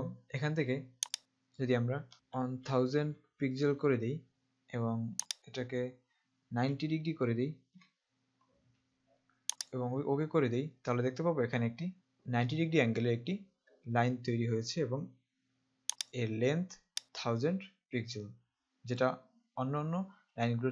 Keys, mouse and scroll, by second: 1.2 click, 2.4 KP_1, 2.6 KP_0, 5.3 click, 6.5 KP_9, 7.8 KP_0, 9.7 click, 16.2 click, 17.0 click.